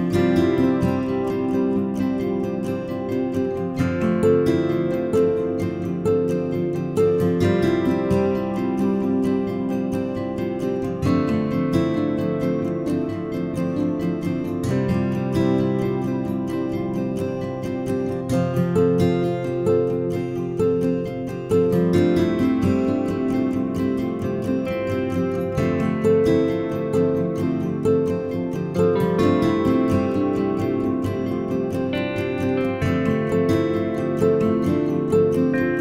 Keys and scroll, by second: 7.5 Right, 7.8 Up, 8.0 Left, 8.5 Down, 8.9 Up, 17.3 1, 17.5 Return, 21.0 ctrl+z, 22.0-23.3 typing, 25.3 Left, 25.8 Left, 26.0 Right, 27.0 Right, 27.2 Right, 29.7 ctrl+z, 33.7-35.1 typing.